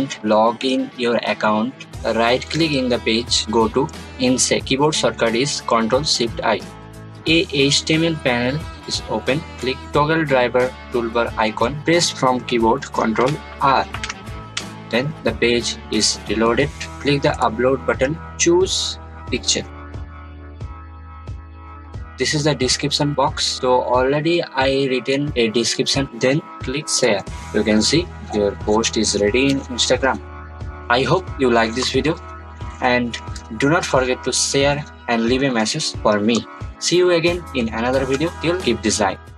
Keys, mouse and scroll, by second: 2.6 right click, 6.9 click, 13.2 click, 13.9 r, 17.4 click, 21.3 click, 26.0 click, 27.0 click, 27.0 click, 27.4 scroll down 2, 28.5 scroll down 1.